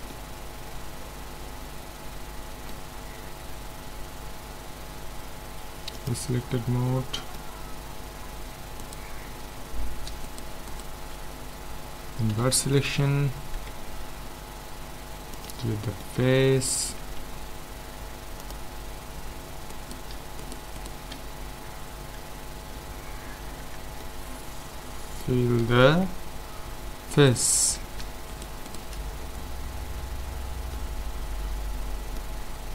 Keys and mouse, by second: 6.0-7.6 drag, 6.9-8.8 middle drag, 8.8-12.3 right drag, 12.3 ctrl+i, 13.6 x, 16.0 click, 17.2 ctrl+Tab, 19.7-22.6 drag, 23.6 f, 24.0-26.9 middle drag, 27.1-28.6 middle drag, 28.6-30.3 right drag, 29.9 f, 30.3 middle click.